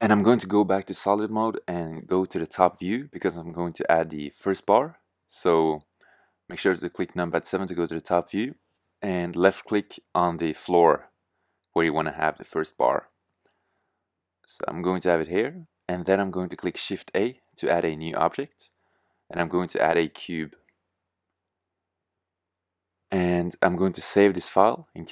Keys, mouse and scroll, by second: 0.0 shift+z, 0.7 middle click, 3.5 KP_7, 4.9-5.3 middle drag, 12.8 middle drag, 13.6 middle click, 14.2 middle click, 17.8 shift+a.